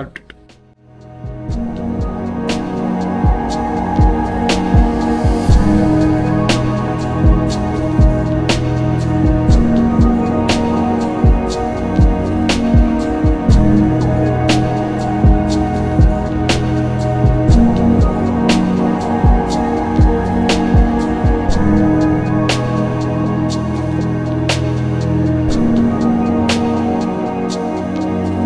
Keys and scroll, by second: 2.3 ctrl+x, 3.0 ctrl+z, 5.7 z, 7.4 z, 7.6 x, 9.2 z, 10.3 z, 14.6 x, 24.8 w.